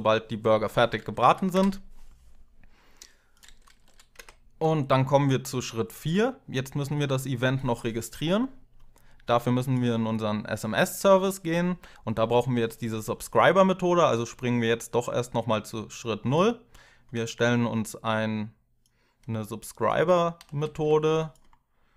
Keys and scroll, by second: 1.0 Home, 1.3 BackSpace, 3.6 Home, 3.9 BackSpace, 20.3 ctrl+c.